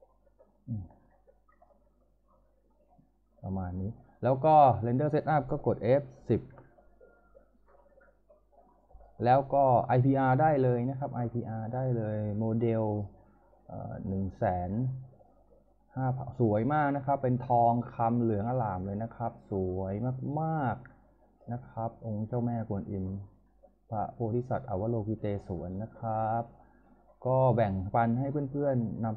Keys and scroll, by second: 6.5 F10.